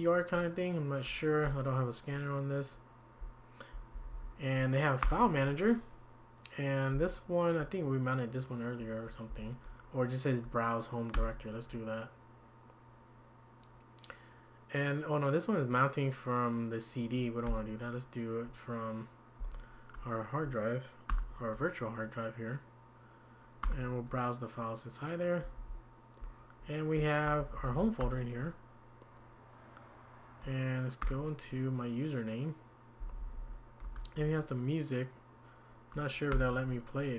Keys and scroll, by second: 1.4 Escape, 3.2 Down, 3.9 Down, 4.1 Down, 5.0 Return, 6.9 Down, 9.3 Up, 11.1 Return, 17.5 Escape, 19.4 Down, 21.1 Return, 23.6 Return, 26.2 Down, 26.9 Up, 27.4 Up, 27.5 Up, 27.7 Up, 28.0 Return, 31.0 Return, 33.3 Down, 33.8 Return, 36.3 Return.